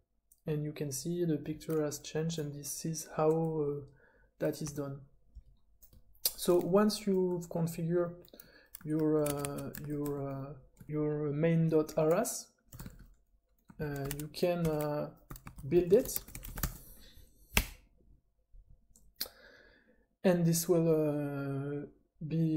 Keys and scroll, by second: 4.8 super+a, 9.2 Escape, 9.4 Escape, 9.8 ctrl+w, 10.0 =, 10.7 space, 12.5-17.3 typing, 14.6 Return, 17.5 Return.